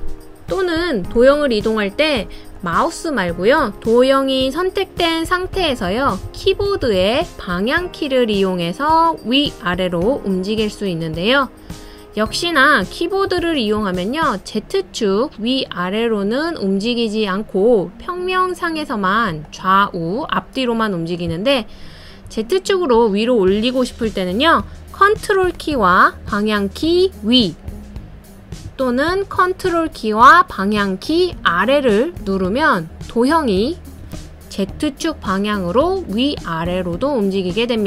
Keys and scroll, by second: 6.0 Page_Up, 6.2 Page_Up, 6.4 Page_Up, 6.6 Page_Up, 6.8 Up, 7.0 Page_Up, 8.1 Home, 8.6 Home, 8.7 Home, 8.7 Left, 8.8 Left, 8.9 Left, 10.9 Down, 11.4 Down, 11.5 Down, 11.6 Down, 11.6 Down, 11.7 Down, 14.3 Right, 14.8 Right, 14.9 Right, 15.0 Right, 15.1 Right, 15.2 Right, 21.8 Up, 22.3 Up, 22.4 Up, 22.5 Up, 22.6 Up, 22.7 Page_Up, 26.8 super+Page_Up, 27.4 super+Page_Up, 27.5 super+Page_Up, 30.5 super+Page_Down, 31.0 super+Page_Down, 31.1 super+Page_Down.